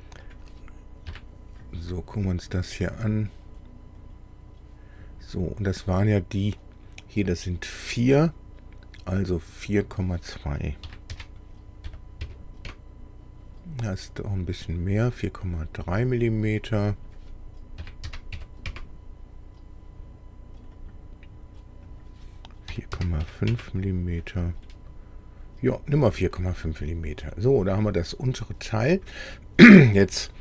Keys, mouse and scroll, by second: 0.3 click, 1.1 KP_1, 3.5 click, 4.0 click, 5.0-5.4 scroll up 2, 9.8 click, 10.8 KP_4, 11.1 KP_Decimal, 11.8 KP_2, 12.2 KP_Enter, 12.7 KP_Enter, 14.4 click, 15.4 scroll up 1, 16.9 click, 17.8 KP_4, 18.0 KP_Decimal, 18.3 KP_3, 18.7 KP_Enter, 20.6 click, 21.9 click, 22.7 KP_4, 22.9 KP_Decimal, 23.2 KP_5, 23.5 KP_Enter, 24.6-26.1 drag, 26.3-27.0 scroll down 4, 27.3 middle click.